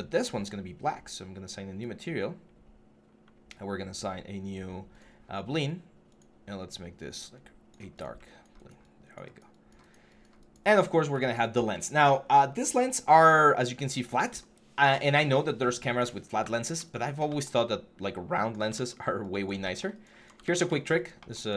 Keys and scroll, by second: 16.2 w, 18.5 ctrl+z, 20.2 ctrl+z.